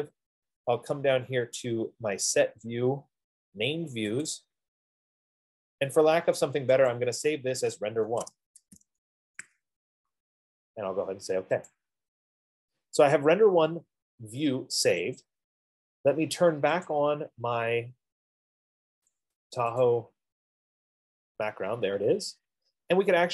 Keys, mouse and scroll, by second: 4.5 click, 7.3 click, 8.5-9.9 typing, 12.1 click, 15.6 click, 17.0 click, 17.4 click, 19.3 click, 20.4 click.